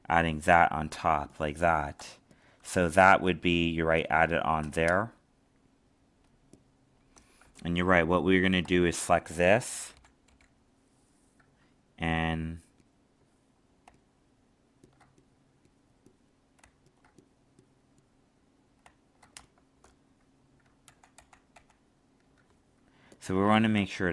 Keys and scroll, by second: 0.9 alt+space, 20.8 ctrl+z.